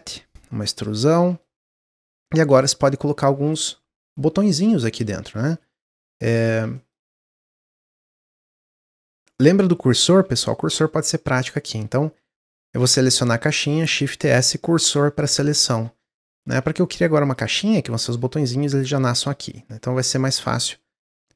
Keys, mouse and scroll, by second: 1.0 middle click, 1.6 Tab, 1.9 middle click, 2.1 Tab, 2.5-5.1 shift+middle drag, 5.1 Tab, 5.6 shift+middle click, 6.3-6.6 scroll up 2, 6.6 shift+middle click, 6.8-7.3 shift+scroll down 2, 7.3 Tab, 7.7-8.3 scroll down 1, 8.3-8.8 middle drag, 8.8-10.1 scroll down 1, 10.6 shift+s, 13.7 shift+s, 16.0 drag, 16.3 shift+a, 17.7 s, 20.1-21.3 drag.